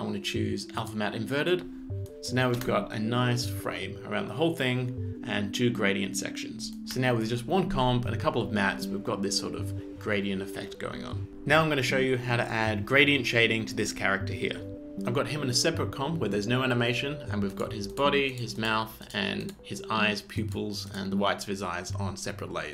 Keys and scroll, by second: 2.6 space, 6.9 space.